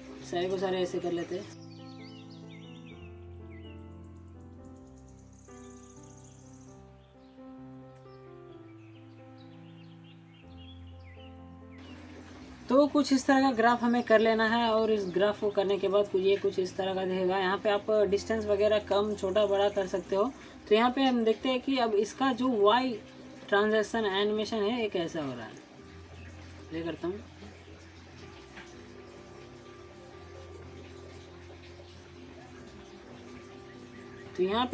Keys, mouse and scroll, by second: 1.6 click, 1.7-2.0 middle click, 2.1 click, 2.2-2.6 middle click, 2.5 scroll up 1, 2.6 scroll down 2, 2.7 alt+middle click, 2.8 alt+scroll up 1, 2.9 alt+middle click, 2.9 click, 3.1-3.4 middle click, 3.5 click, 3.6 middle click, 3.7-4.2 click, 3.9 middle click, 4.3 click, 4.4 middle click, 4.5-5.0 click, 5.0 ctrl+z, 5.1-5.4 click, 5.2 middle click, 5.5 click, 5.5 alt+scroll down 2, 5.6 alt+middle click, 5.7 alt+middle click, 5.9 alt+scroll up 1, 5.9 click, 6.0 shift+middle click, 6.4 scroll down 2, 6.4 click, 6.6 alt+middle click, 6.8 alt+scroll up 2, 6.9 alt+middle click, 7.0 alt+middle click, 7.1 click, 7.1 shift+middle click, 7.4 click, 7.6 middle click, 7.9-8.3 click, 8.2 click, 8.4 shift+middle click, 8.7 shift+middle click, 8.8 middle click, 9.0 shift+middle click, 9.5 click, 9.9 ctrl+z, 10.0 click, 10.1 middle click, 10.4 click, 10.5 shift+middle click, 10.8 middle click, 11.0 click, 11.2 middle click, 11.4 click, 11.7-13.6 middle drag, 13.3 click, 13.6 scroll down 1, 14.2 alt+scroll down 1, 15.0-15.6 alt+middle drag, 16.9-17.3 scroll down 1, 17.4-17.7 alt+scroll up 1, 17.7 alt+middle click, 18.3 click, 23.7 click, 24.6 alt+scroll down 1, 24.9 alt+click, 25.8 alt+scroll down 1, 26.0 alt+click, 26.4 alt+middle click, 26.6-27.2 alt+click, 27.1 alt+scroll up 1, 27.7 alt+click, 29.0 click.